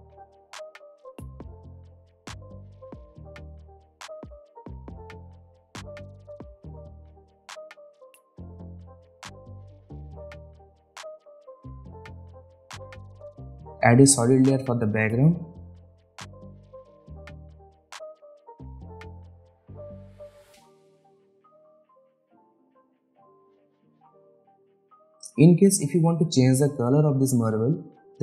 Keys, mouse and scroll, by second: 5.9 alt+scroll down 1, 7.3-7.9 drag, 11.9 ctrl+z, 13.3 click, 14.6 right click, 15.1 click, 16.0 right click, 16.7 click, 16.8 right click, 17.2 click, 19.4-20.3 typing, 20.4 Return, 21.8 click, 26.4 click, 27.4-28.2 typing.